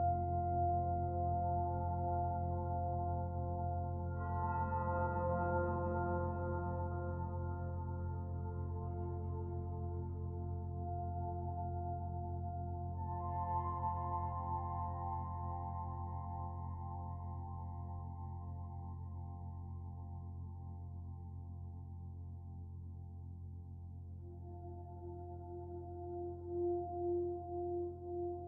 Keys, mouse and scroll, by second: 2.0 middle click, 3.1 click, 4.2 Delete, 6.4-7.3 scroll up 1, 7.3-7.9 scroll up 2, 7.9 click, 9.1 alt+click, 10.5 middle click, 10.5 click, 13.4 click, 15.9-16.5 scroll down 1, 16.5 middle click, 16.5-16.8 scroll down 2, 18.6 shift+middle click, 19.8 click, 21.1 click, 21.6 click, 22.6 click, 22.9 middle click, 27.4 shift+a.